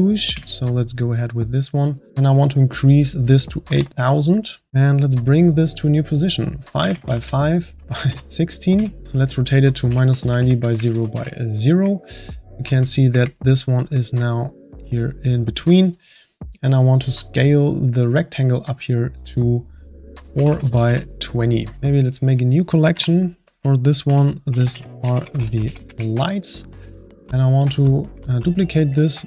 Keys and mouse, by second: 2.7-3.9 drag, 3.9 KP_0, 3.9 KP_0, 5.9-8.7 drag, 10.5 click, 12.3-19.0 middle drag, 19.0-21.7 drag, 21.7-22.3 shift+middle drag, 22.3 click, 22.9 m, 25.8 Return, 27.4 click, 28.5-29.2 middle drag.